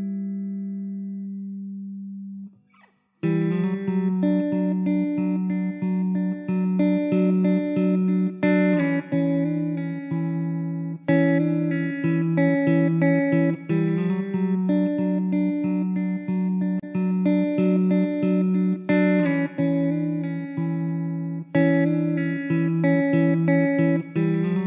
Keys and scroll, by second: 0.0 `, 0.7 KP_0, 1.9 ctrl+s, 4.0 KP_0, 4.6 `, 6.4 shift+a, 8.1 s, 11.6 s, 11.8 y, 12.7 s, 21.4 s.